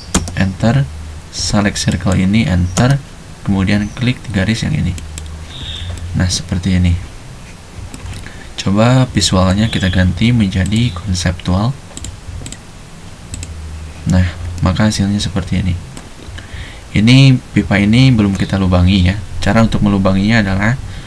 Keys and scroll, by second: 0.0-0.1 typing, 2.8 space.